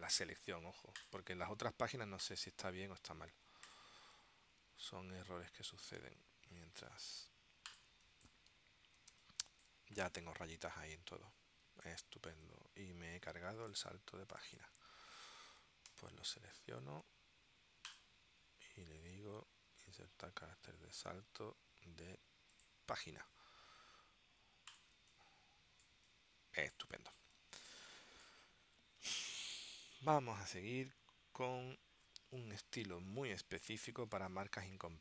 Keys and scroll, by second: 8.0 space, 9.3 space, 11.9 space, 25.0 space, 34.2 space.